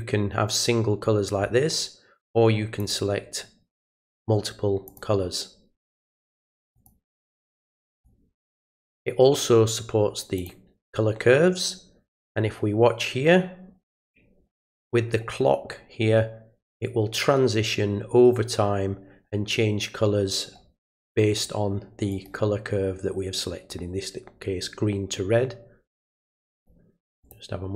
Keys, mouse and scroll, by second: 2.8 click, 4.8 click, 6.7 click, 7.3 click, 7.9 click, 10.3 click, 22.1 right click, 27.2 click.